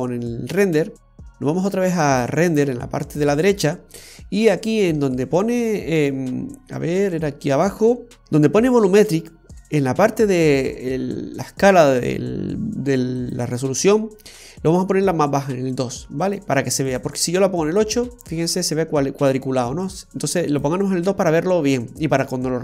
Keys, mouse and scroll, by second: 2.2 click, 4.6-5.2 scroll down 2, 5.5-6.4 scroll down 2, 6.4-6.8 scroll up 3, 8.2 scroll up 1, 13.2 click, 16.9 click, 19.9 click.